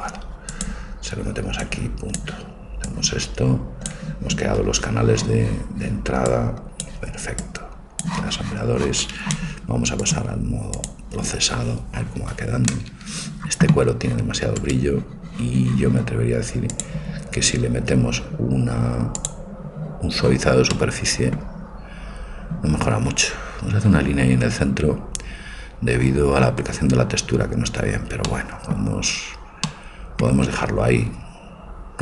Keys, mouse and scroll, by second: 8.3 click, 10.9-11.9 drag, 13.3 middle click, 14.6-16.6 right drag, 16.7-17.7 drag, 19.1 click, 20.1 click, 20.8-21.8 middle drag.